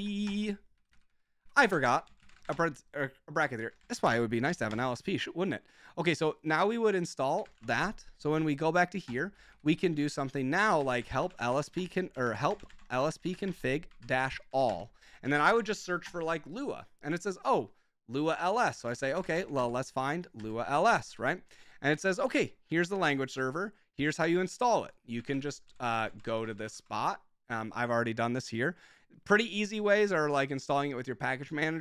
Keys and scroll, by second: 0.0-4.4 typing, 3.4 Escape, 4.4 Up, 4.6 Return, 7.3-8.0 typing, 9.0 Return, 9.3-16.0 typing, 14.0 ctrl+n, 14.1 ctrl+n, 18.3-20.8 typing, 25.1-27.3 typing.